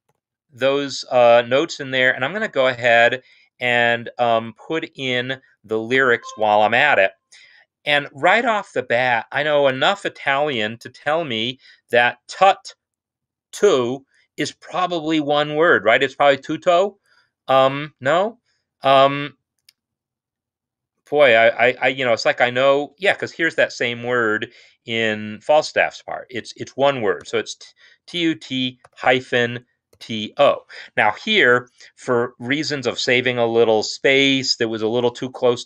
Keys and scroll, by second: 7.4 ctrl+l, 10.2 shift+t, 10.4 u, 27.2 typing, 28.8-30.2 typing.